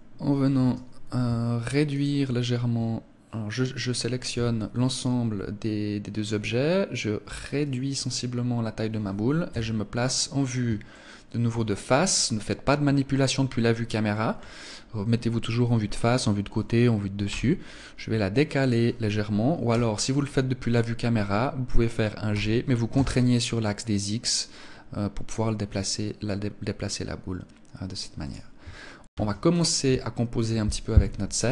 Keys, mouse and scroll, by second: 2.0 shift+right click, 7.6 click, 9.4 KP_1, 10.8 shift+middle click, 11.7-12.4 scroll down 1, 17.2 g, 18.6 click, 19.6 KP_0, 22.2 g, 28.2 click, 29.0 ctrl+s.